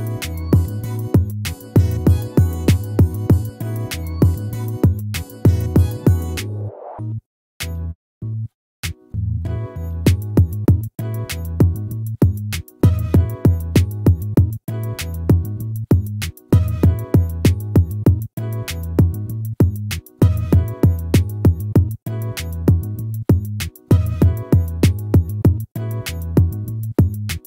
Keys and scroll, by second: 0.4 ctrl++, 6.0 ctrl+-, 16.7 ctrl++, 24.4 ctrl++.